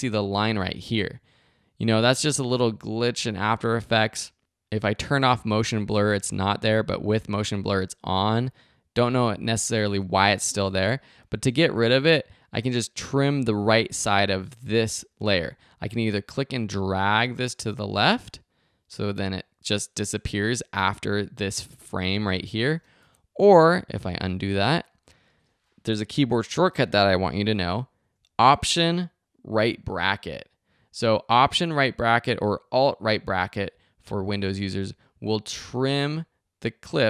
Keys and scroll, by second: 23.0 super+z, 27.6 alt+].